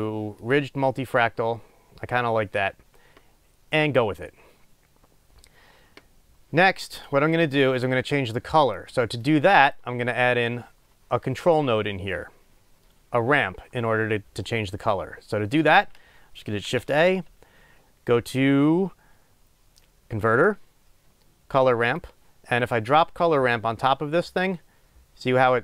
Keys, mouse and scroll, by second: 9.2 click.